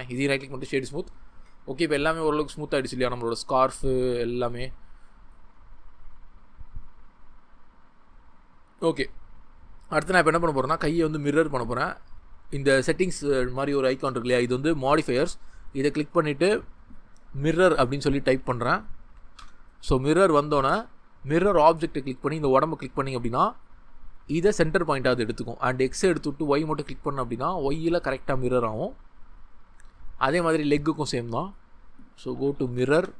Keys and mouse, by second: 11.6 click, 15.8-19.4 drag, 17.7 i, 21.4 click, 22.4-27.8 drag, 31.1-33.0 drag, 32.8 r.